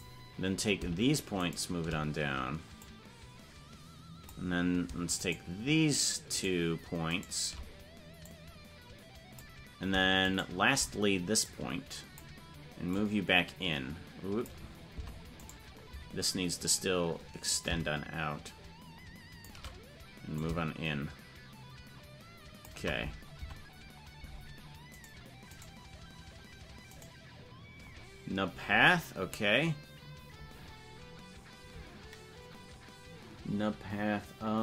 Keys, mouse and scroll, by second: 1.4 shift+right click, 2.8-4.2 drag, 5.2-7.5 shift+right drag, 8.2-9.4 drag, 10.2 shift+right click, 11.4 click, 12.9-14.4 drag, 15.0 Tab, 15.5 right click, 17.4-19.5 shift+drag, 20.3-22.7 shift+drag, 23.4 Tab, 25.1 right click.